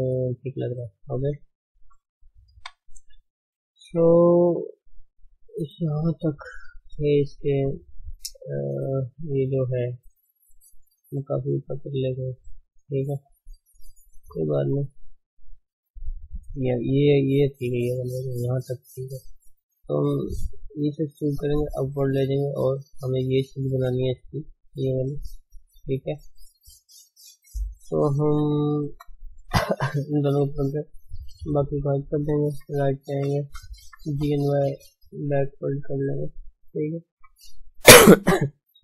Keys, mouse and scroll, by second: 0.3-0.7 scroll down 2, 0.7-1.3 middle drag, 1.3 Tab, 2.6 KP_1, 2.9-3.2 scroll up 1, 3.2 shift+z, 3.6 shift+middle click, 4.1 shift+z, 4.8 shift+z, 5.9 shift+z, 6.8-7.8 scroll down 5, 7.8-8.3 scroll up 3, 8.7 scroll up 1, 10.1 scroll up 1, 10.9 click, 11.8 d, 12.5-13.2 drag, 13.2 d, 13.8 shift+z, 14.6 click, 15.3 Tab, 15.7-16.0 scroll up 1, 16.0-18.9 shift+middle drag, 18.9 click, 20.8 e, 22.8 shift+z, 24.6-26.1 drag, 26.1 d, 26.3 scroll up 3, 26.7 shift+z, 26.9-27.3 shift+middle drag, 27.3 Tab, 27.9 shift+click, 28.8 shift+h, 29.3 ctrl+space, 29.9 click, 30.3 Tab, 30.7-31.0 scroll down 3, 31.0-32.5 middle drag, 32.5 KP_3, 33.5 shift+z, 33.9 g, 35.7 shift+z, 35.9-37.1 middle drag, 37.1 KP_1.